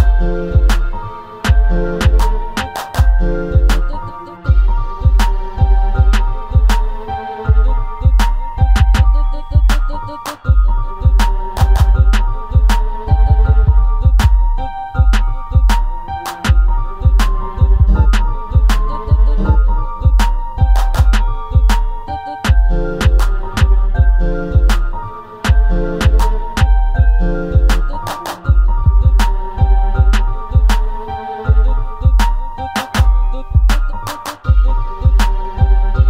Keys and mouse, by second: 0.2 click, 3.8 r, 5.5 click, 6.3 click, 7.6-8.1 middle drag, 8.8 middle click, 9.2 Tab, 10.0 click, 10.2 Tab, 10.5 middle click, 11.4 click, 12.4 click, 13.0 click, 13.8 Delete, 14.4 middle click, 15.6 click, 16.1 middle click, 17.2 click, 18.2-18.6 drag, 20.2 alt+h, 20.8 click, 21.6 h, 22.7 click, 22.8 h, 23.2-23.6 middle drag, 24.9 middle drag, 28.0 click, 29.1 click, 31.1 click, 32.4 click, 33.7 KP_1, 34.6 click, 35.5 click.